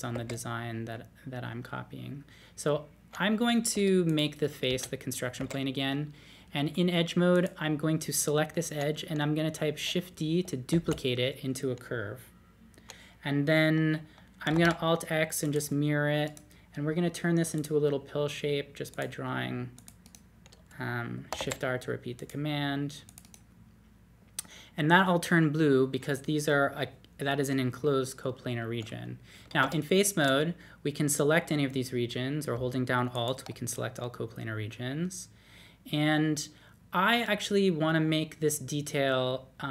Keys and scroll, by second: 0.1 2, 3.7 3, 4.7 space, 5.4 2, 10.7 shift+d, 14.5 alt+x, 21.3 shift+r, 29.6 3.